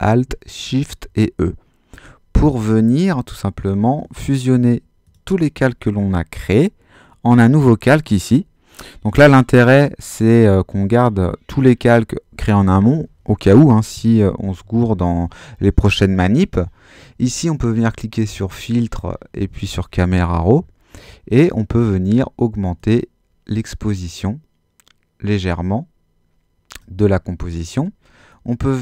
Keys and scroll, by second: 1.0 alt+shift+super+e.